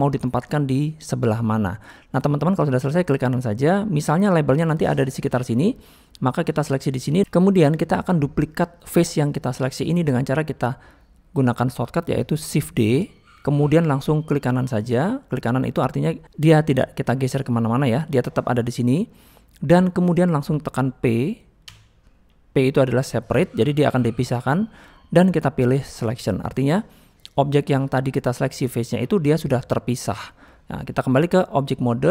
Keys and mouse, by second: 1.5-2.1 middle drag, 2.3 middle click, 3.4-4.5 middle drag, 5.7-7.2 middle drag, 7.4 middle click, 8.1 middle click, 9.6 middle click, 19.4 middle click, 31.0-31.8 drag.